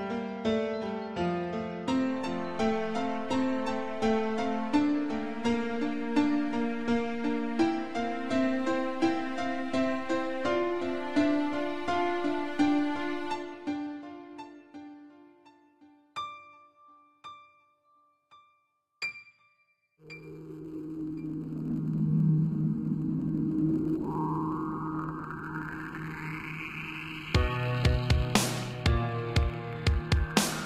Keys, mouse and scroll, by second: 0.0 shift+click, 1.4 g, 4.1 click, 4.2 click, 4.8 click, 4.9 click, 5.8 r, 7.0 click, 7.2 click, 9.4 click, 9.5 click, 10.1 scroll down 3, 10.4 middle click, 11.9-12.3 scroll up 2, 13.1 scroll up 1, 15.2 click, 15.8 scroll up 1, 16.7 shift+click, 17.8-18.2 scroll, 17.9 middle click, 19.1 ctrl+z, 19.7 middle click, 19.8 shift+click, 21.0 shift+click, 21.1 shift+click, 21.7 7, 22.9 r, 24.2 click, 25.5 click, 25.9 g, 27.2 click, 28.1 click, 28.4 g, 29.1 click, 29.3 scroll down 3, 29.7 middle click, 30.1-30.6 scroll up 3.